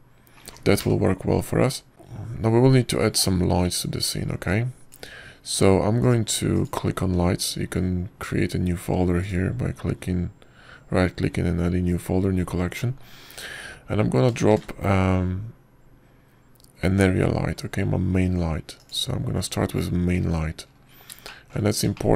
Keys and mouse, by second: 7.9 drag, 8.4 click, 11.1-14.2 drag, 16.4 shift+a.